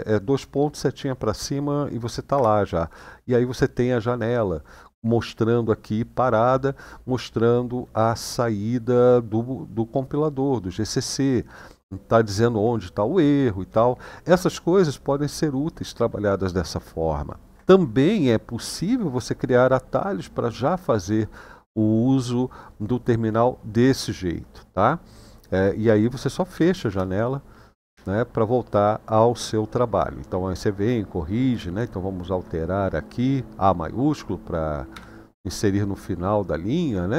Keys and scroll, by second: 2.1 Return, 26.3 typing, 26.6 Return, 31.6 shift+a, 34.7 i.